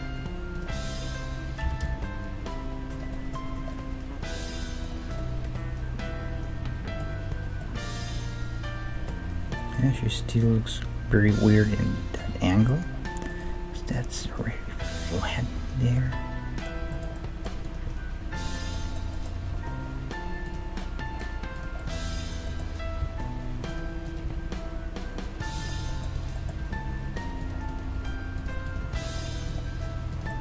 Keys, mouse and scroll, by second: 0.8-2.8 right drag, 1.7 g, 3.1 middle click, 3.6 Tab, 6.5 middle click, 7.2-9.5 middle drag, 7.2-7.6 scroll up 1, 9.7-11.3 middle drag, 11.3-11.9 scroll up 1, 12.2-15.3 middle drag, 15.3 scroll up 1, 16.0-24.8 middle drag, 17.6-20.2 right drag, 17.9 Tab, 19.4 g, 21.5-24.0 right drag, 23.0 g, 24.2-26.0 right drag, 24.2 g, 25.7 middle click, 26.2-28.1 drag, 26.2-30.4 right drag, 26.6 g, 27.9 g, 28.8 g, 30.2-30.4 middle drag.